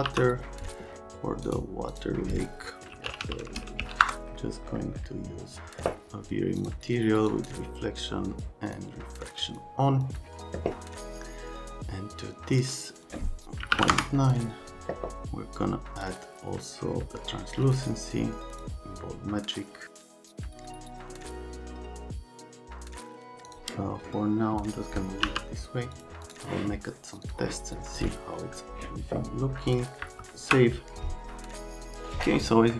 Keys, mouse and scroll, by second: 0.1 m, 1.4 right click, 1.9 click, 2.6-4.4 typing, 6.6 click, 7.3 click, 8.2 click, 8.7 click, 9.4 click, 10.0 click, 13.6 KP_Decimal, 13.7 KP_9, 13.9 KP_Enter, 17.6 click, 18.5 click, 20.2 click, 21.2 click, 21.3 click, 21.8 middle click, 22.3 middle click, 22.5 middle click, 22.7 middle click, 23.4 middle click, 25.2 m, 25.9 click, 26.2 click, 27.2 click, 28.0 click, 30.2 ctrl+s.